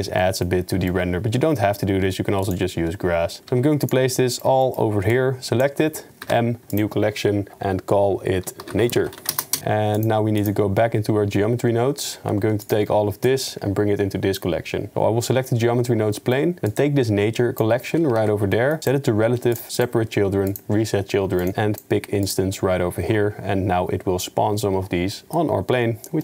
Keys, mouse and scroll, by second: 0.2 middle click, 0.7 shift+middle drag, 1.4 s, 2.8 g, 3.5 s, 4.2-4.5 middle drag, 4.6 shift+click, 6.2 m, 9.6 KP_0, 10.0 click, 10.5 click, 12.6 shift+right click, 16.1 click, 16.8 click, 18.3 ctrl+s, 18.5 click, 19.6 click, 20.5 click, 21.6 click.